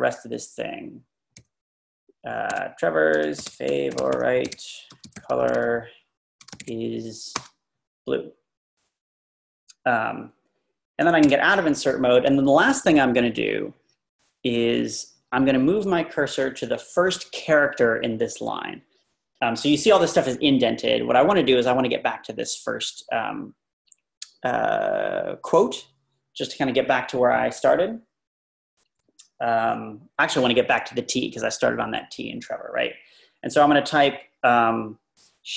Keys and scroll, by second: 2.5-7.4 typing, 11.3 Escape.